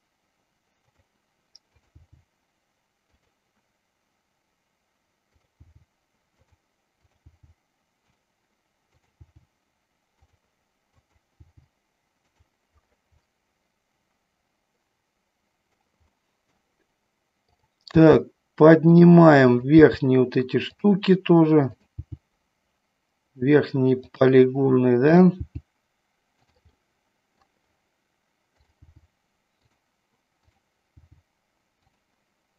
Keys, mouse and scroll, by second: 1.9 click, 2.0 g, 3.3 click, 5.4 click, 7.1 click, 8.9 click, 12.5 click, 13.3 scroll up 1, 13.4-15.9 middle drag, 16.2 middle click, 17.5 click, 19.0 click, 19.5 click, 24.1 click, 24.1 g, 27.0 middle click, 29.8 click, 29.8 g, 30.5 click.